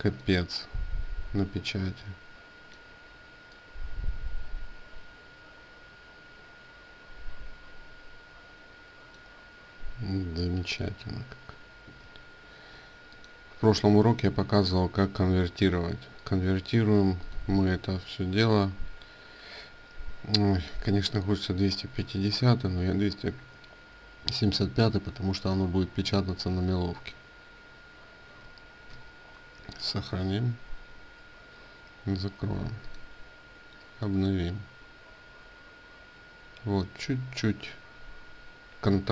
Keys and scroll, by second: 28.5 ctrl+s, 30.7 ctrl+w, 32.9 ctrl+w.